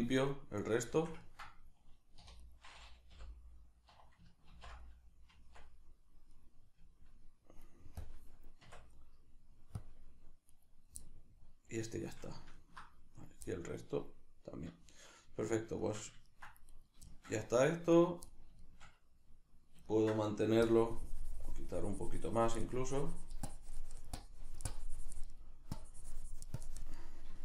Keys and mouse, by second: 0.7-2.5 middle drag, 2.2 3, 2.5 right click, 3.1 l, 3.9 1, 6.4 right click, 6.8 Tab, 8.0-10.5 drag, 8.7 Tab, 10.5 right click, 11.1-13.2 middle drag, 13.2 right click, 13.5 middle click, 13.9 right click, 14.8-16.7 shift+middle drag, 16.7 right click, 17.0 shift+middle click, 18.0 right click, 18.3-20.6 shift+middle drag, 20.6-25.4 drag, 25.4 middle click, 25.7-26.9 drag, 26.9-27.4 middle drag.